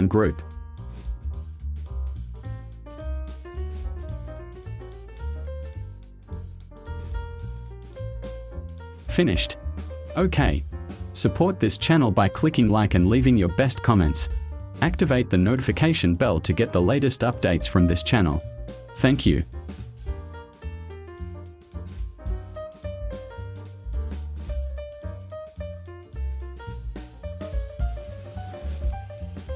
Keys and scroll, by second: 8.3 space.